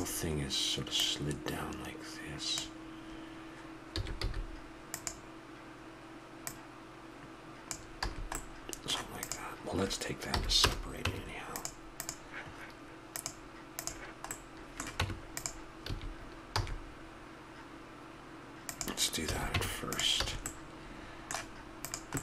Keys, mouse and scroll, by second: 1.0-2.8 drag, 3.9 s, 6.4-8.2 drag, 7.9 a, 8.4-10.1 middle drag, 9.2-10.8 drag, 10.3 p, 11.0 Tab, 11.9-13.8 right drag, 14.9 Tab, 15.8 a, 16.5 e, 19.2 a, 19.5 Tab, 20.2 a, 22.1-22.2 drag.